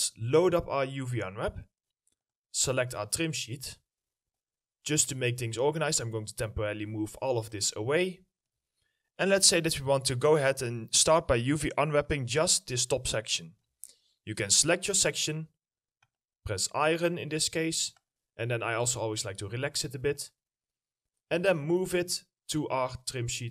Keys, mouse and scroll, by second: 3.1-6.8 scroll down 1, 8.0 alt+middle click, 12.0 double click, 18.8 middle click, 19.3-22.0 scroll up 1.